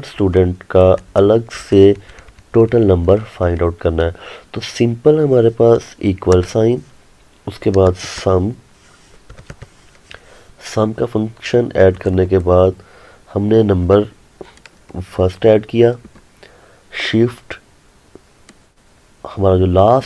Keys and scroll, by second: 15.0 ctrl+Num_Lock.